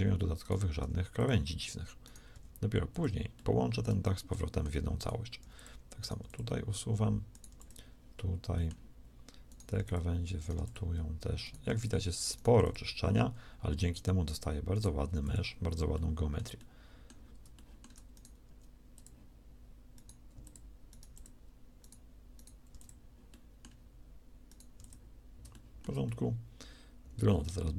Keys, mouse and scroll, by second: 8.2 middle click, 10.1 x, 10.4 x, 15.8 x, 16.0 middle click, 18.3 shift+x, 21.0 x, 23.2 x, 24.6 x.